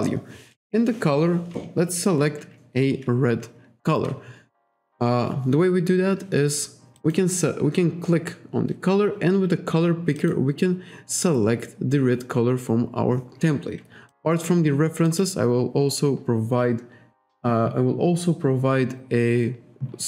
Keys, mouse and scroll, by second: 7.0 click, 10.2 click, 15.1 click.